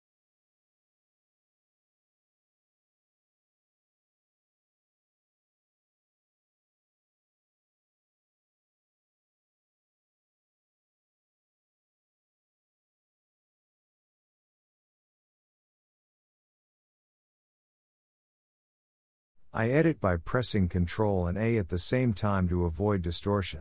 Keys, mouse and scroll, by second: 1.0 click, 1.3 e, 2.1 ctrl+a, 3.2 click, 3.9 ctrl+a, 5.2 click, 5.7 ctrl+a, 8.0-9.4 middle drag, 9.4 click, 9.7 ctrl+a, 11.9 click, 12.2 ctrl+a, 13.4 click, 14.0 middle click, 14.5 g, 15.7 ctrl+a, 16.5 click, 16.9 g, 17.6-18.0 scroll down 2, 18.0 shift+middle click, 18.3-18.8 scroll up 3, 19.8 x, 20.8 click, 21.0 x, 22.4-23.6 shift+middle drag.